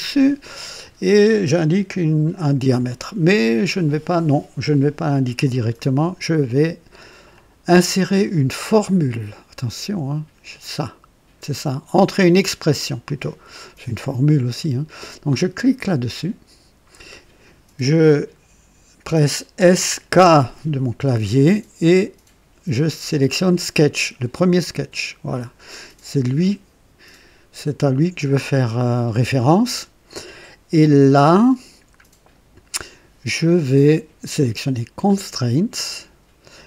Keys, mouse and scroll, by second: 7.2-8.3 drag, 16.0 click, 19.5-20.0 typing, 24.4 click, 34.8 click.